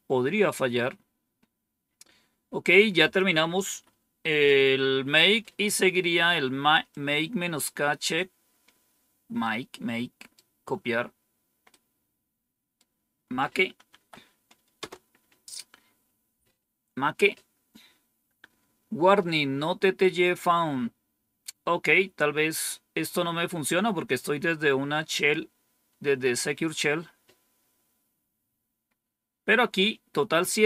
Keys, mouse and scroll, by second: 2.9 click, 3.5 Up, 5.0 Down, 6.8-8.8 drag, 9.3 right click, 11.6-12.7 right drag, 13.8 Right, 14.7 Return.